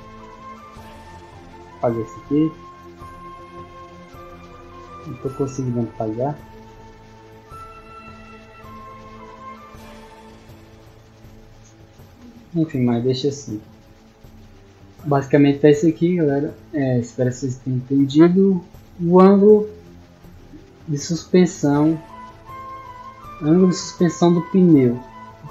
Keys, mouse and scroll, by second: 3.1 right click, 4.3 click, 7.4 a, 8.4 click, 12.8 middle drag, 13.1 scroll down 2, 13.6 middle click, 15.0 scroll down 2, 16.2-17.5 scroll down 2, 17.5 scroll down 1, 18.3-24.8 middle drag.